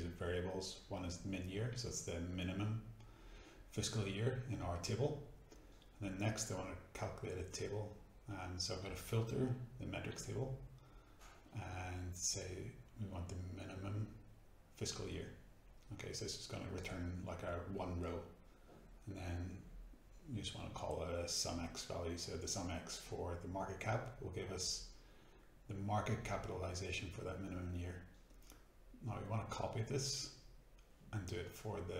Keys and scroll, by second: 0.0-4.7 typing, 0.0 shift+Return, 5.6 Tab, 6.4-21.1 typing, 13.3 shift+Return, 21.4 shift+Return, 22.3 Return, 27.1 ctrl+c, 30.4 ctrl+v.